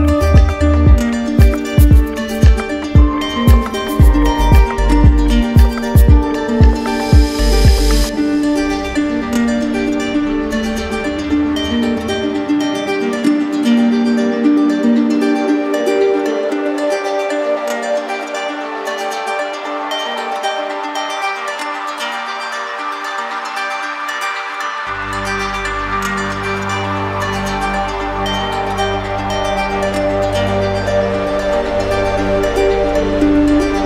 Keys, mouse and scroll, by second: 0.7-1.8 drag, 4.3 click, 5.8 ctrl+z, 8.2 right click, 9.5 click, 12.0 click, 13.3-14.3 drag, 13.4 ctrl+z, 16.3-17.4 drag, 23.4-24.5 drag, 26.3-27.4 drag, 29.3-30.4 drag, 29.5 ctrl+z.